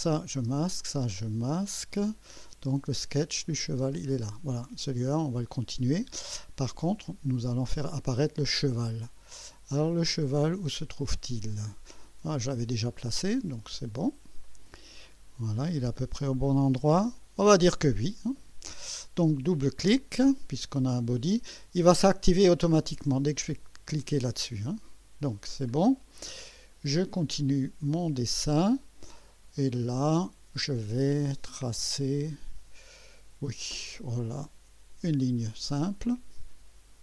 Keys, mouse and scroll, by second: 0.0 click, 0.4 space, 0.8 click, 1.1 space, 2.2 scroll up 2, 3.4 click, 3.8 space, 7.7 click, 9.0 scroll down 1, 9.9 scroll down 1, 11.0 space, 12.2 scroll up 1, 13.1-13.8 right drag, 13.9-14.2 scroll up 1, 14.4-15.2 right drag, 15.3 scroll up 1, 15.8-16.6 right drag, 18.4 right click, 24.0 click, 26.2 right click, 35.5 click.